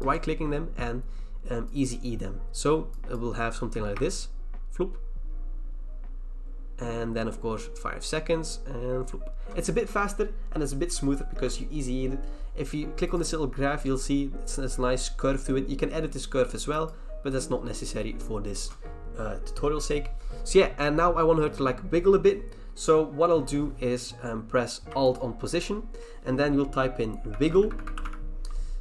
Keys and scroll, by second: 26.9-28.8 typing.